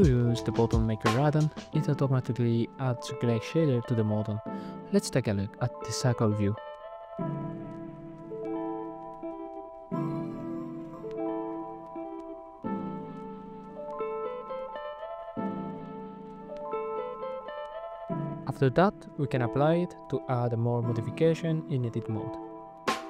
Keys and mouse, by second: 3.0 n, 6.9 shift+a, 9.3 click, 13.6 click, 16.8 middle click, 18.2 n, 20.6 click, 21.2 click, 21.9 n, 22.7 Tab.